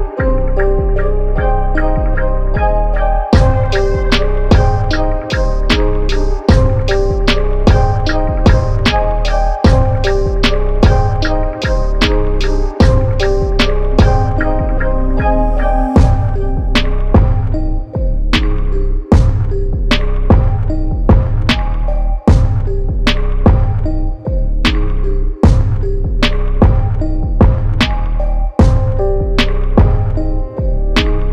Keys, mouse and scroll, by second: 0.1 KP_0, 0.3 Tab, 1.8 click, 6.3 click, 6.7 KP_1, 7.0 KP_0, 9.3 click, 10.1 KP_9, 10.2 KP_0, 12.0 click, 13.7 click, 16.7 click, 21.1 KP_2, 21.4 KP_0, 22.2 click, 23.0 KP_1, 23.2 KP_5, 24.0 Tab, 25.2 KP_2, 25.5 KP_0, 25.9 Tab, 26.3 click, 28.0 click.